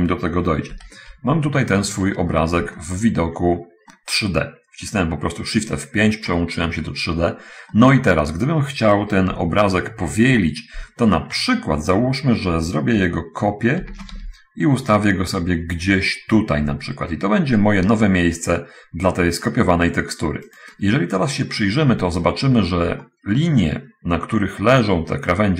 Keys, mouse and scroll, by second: 0.7 shift+F5, 2.0 scroll up 1, 3.3 alt+z, 3.3 alt+middle click, 4.2-6.6 middle drag, 7.6 middle click, 8.1 middle click, 9.7 5, 10.7 7, 14.2 shift+d, 14.2 shift+x, 20.9 click, 21.5 scroll down 1, 22.5-23.2 scroll up 1, 23.4 shift+middle click.